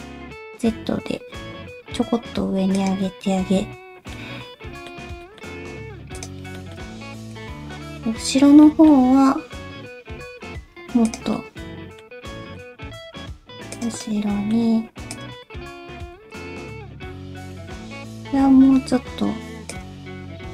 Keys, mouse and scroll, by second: 4.1 middle click, 4.1 /, 5.2 shift+middle click, 5.4-6.1 scroll up 3, 6.1 click, 6.6 shift+middle click, 7.3 ctrl+click, 7.7 middle click, 8.6 middle click, 10.2 g, 11.3 middle click, 12.3 middle click, 13.1 g, 14.0 middle click, 15.1 click, 15.5 shift+middle click, 16.3 ctrl+click, 16.8 scroll up 1, 18.0 scroll up 1, 18.3 g, 20.0 ctrl+z.